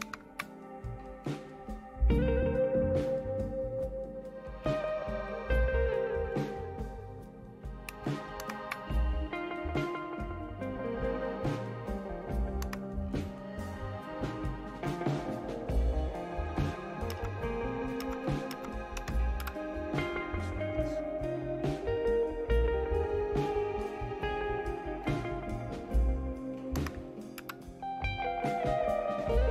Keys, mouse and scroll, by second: 0.0 super+Left, 2.5-7.6 drag, 8.4 super+Right, 12.6 Right, 17.1 Up, 18.0 Up, 18.5 Up, 18.9 Down, 19.4 Return, 23.9-26.7 right drag, 26.7 Right, 27.4 Return.